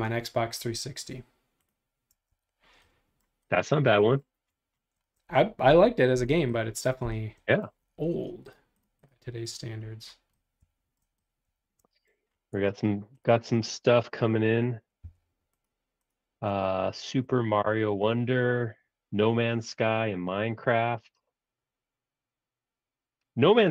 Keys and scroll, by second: 2.1 space, 2.3 Escape, 15.0 b.